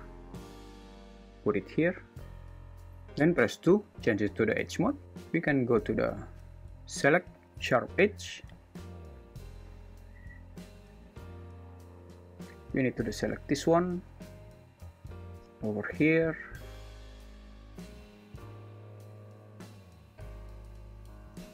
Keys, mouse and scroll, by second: 1.6-2.6 drag, 3.7 2, 5.5 click, 6.9-8.1 drag, 21.3 shift+super+z.